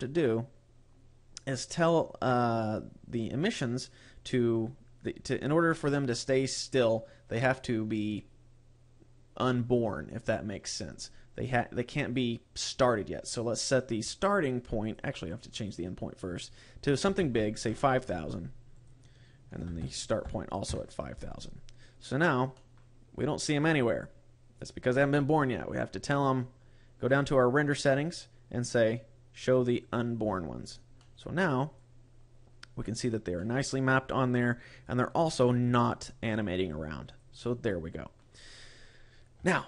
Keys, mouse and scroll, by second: 0.2 scroll down 1, 13.1 click, 15.4 click, 18.6 click, 22.0 scroll down 3, 22.4 middle click, 23.1 click, 25.3-27.0 scroll down 11, 27.0-27.9 scroll down 6, 29.7 click, 30.4 scroll up 2, 30.8 middle click, 31.7 click, 33.2 middle click, 34.8 click, 36.2 click, 37.3 middle click, 38.2 scroll up 3, 39.4 shift+middle click.